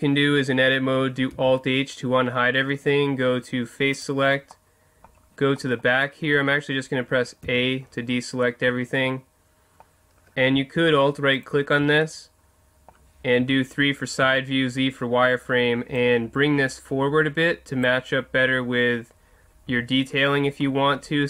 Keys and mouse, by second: 1.3 alt+h, 3.9 click, 4.5-5.8 middle drag, 7.4 a, 10.6 middle click, 11.3 right click, 12.1 middle click, 13.4 KP_3, 14.2 z, 16.0 click, 19.7 z, 20.4-21.2 middle drag.